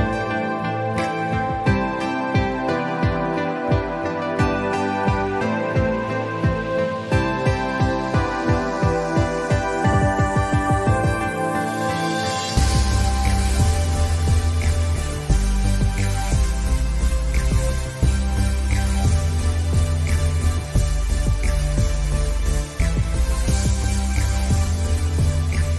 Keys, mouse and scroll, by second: 0.1 click, 1.7 scroll up 1, 2.2-4.0 drag, 4.0 ctrl+z, 4.6-6.4 drag, 6.6 scroll down 1, 7.0 space, 7.0 click, 7.2 space, 7.6-9.1 drag, 10.1-10.8 scroll down 1, 10.8-12.0 drag, 12.6 alt+scroll down 1, 12.8 space, 13.3 click, 20.9 click, 21.6 ctrl+s, 21.9 click, 22.2 alt+scroll up 1, 22.3 scroll down 1, 22.6 click, 24.1 click, 24.2 space, 24.7 click.